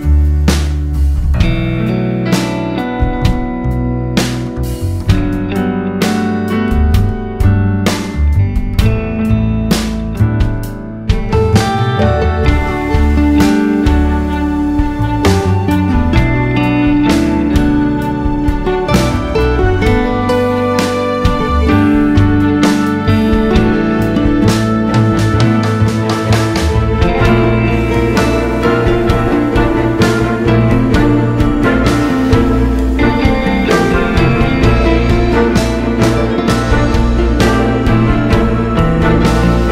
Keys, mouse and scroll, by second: 0.3 `, 3.4-4.9 drag, 6.4 click, 8.8 `, 11.4 click, 12.1-12.4 scroll down 1, 13.7 click, 15.1-19.0 drag, 22.4-23.8 drag, 26.2-29.7 drag, 30.2 scroll up 1, 30.6 `, 32.6 click, 35.5 scroll down 1, 35.7 `, 37.6 scroll up 1, 37.7 `, 38.3 click.